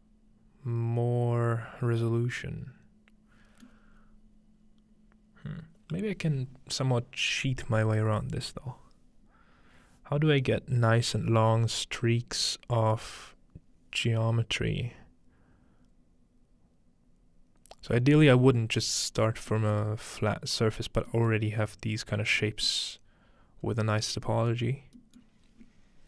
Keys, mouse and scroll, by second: 19.5-21.1 middle drag, 21.3-22.4 middle drag, 23.3 middle click, 23.6-24.7 scroll up 2, 24.6 middle click, 24.7-25.5 scroll down 2.